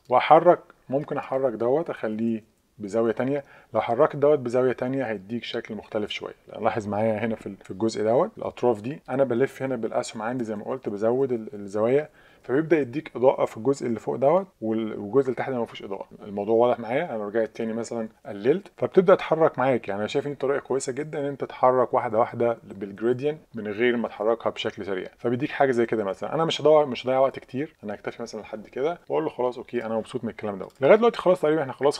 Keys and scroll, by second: 2.0 Page_Down, 2.1 Page_Down, 2.3 Page_Down, 2.4 Page_Down, 2.6 Page_Down, 3.1 Page_Up, 3.7 Up, 3.8 Page_Up, 3.9 Page_Up, 4.9 Up, 5.1 Up, 5.9 Page_Up, 6.1 Up, 9.8 Down, 10.0 Down, 10.2 Down, 10.4 Up, 10.6 Page_Up, 10.7 Page_Up, 10.9 Page_Up, 12.7 Up, 18.1 Down, 18.2 Down, 18.3 Down, 18.5 Down, 20.1 Down, 20.7 Down, 21.0 Down, 22.2 Page_Up, 22.3 Up, 22.6 Up, 23.0 Up, 23.2 Up, 23.4 Up, 23.9 Page_Up, 24.8 Up, 25.9 Up, 26.3 Down, 26.8 Down, 26.9 Down, 27.3 Down, 27.5 Down, 28.0 Down.